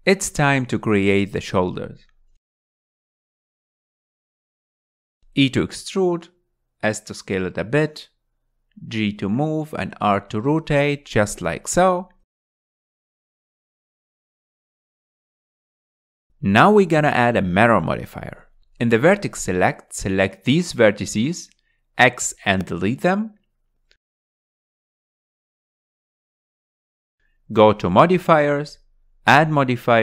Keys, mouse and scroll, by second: 2.5 KP_1, 4.1-4.5 scroll up 2, 4.5-6.0 shift+middle drag, 6.0 e, 8.4 s, 10.5 g, 12.1 r, 12.7 g, 14.4-16.1 middle drag, 16.1 KP_1, 16.5-17.0 scroll down 6, 17.0-19.0 shift+middle drag, 19.0 alt+z, 19.8 1, 20.6 click, 22.6 click, 24.2 x, 26.7 x, 29.2 drag.